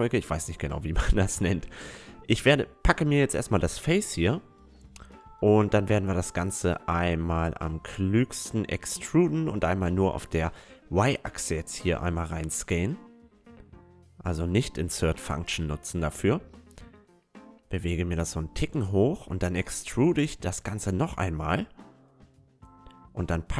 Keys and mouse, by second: 0.4-1.4 right drag, 6.4 e, 7.2 s, 12.2-14.7 middle drag, 14.7-17.9 drag, 17.9 e, 21.4-23.2 drag, 22.3-23.5 right drag, 22.5-23.5 middle drag.